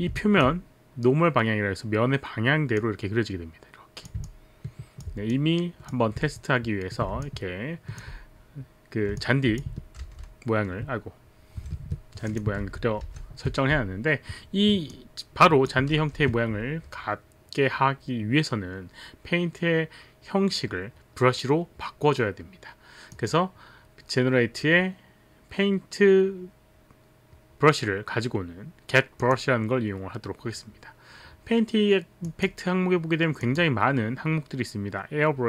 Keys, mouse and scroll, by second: 0.2 alt+click, 2.8 click, 4.2 alt+click, 5.3 click, 7.2 alt+click, 9.2 alt+click, 9.7 alt+click, 10.0 ctrl+z, 10.0 ctrl+s, 11.8 Escape, 12.3 click, 12.6 ctrl+z, 12.8 ctrl+z, 12.8 click, 13.1 ctrl+z, 13.4 ctrl+z, 14.9 click, 15.8 click, 16.2 ctrl+z, 23.2 click, 29.2 click, 32.2 click, 33.4 click.